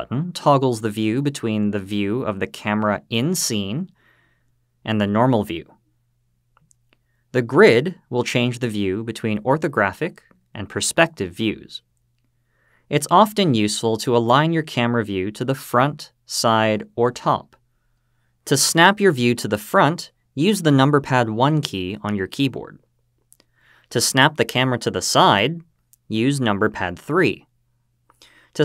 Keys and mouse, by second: 2.8 click, 5.0 click, 9.2 click, 10.9 click, 21.4 KP_1, 25.5 KP_3.